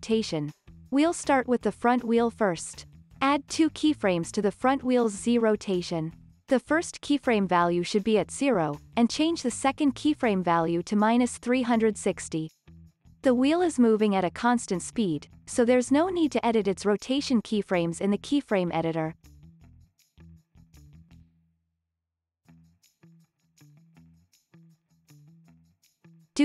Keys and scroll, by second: 13.5-14.4 typing, 15.8 space, 23.3 space, 23.7 super+s.